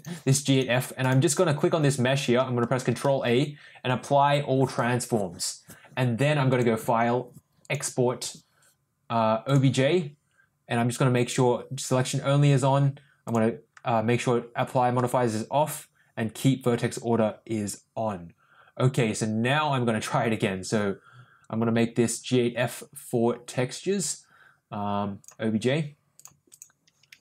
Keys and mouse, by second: 1.0 click, 6.4-9.6 ctrl+drag.